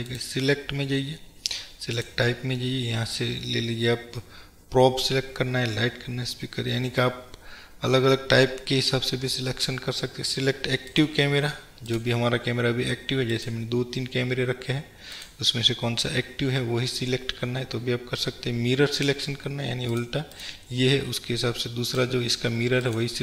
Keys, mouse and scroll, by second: 13.3 click, 15.1-20.1 drag, 20.4 click, 22.0-23.2 drag.